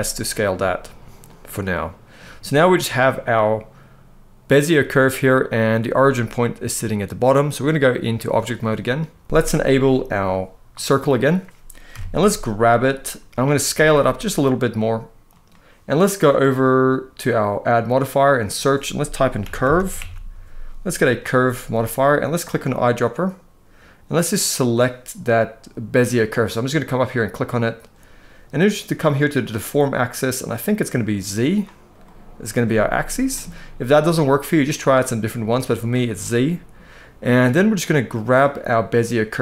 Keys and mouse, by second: 0.1 click, 1.0 middle click, 2.3 click, 2.8-4.4 middle drag, 7.2 click, 10.4 click, 11.6 KP_1, 12.5 click, 13.4 s, 17.4-21.0 drag, 22.9 click, 29.0-30.8 drag, 31.7-32.2 middle drag, 32.5-32.8 shift+middle drag, 34.2-35.6 drag, 36.0 middle click, 37.2 middle click.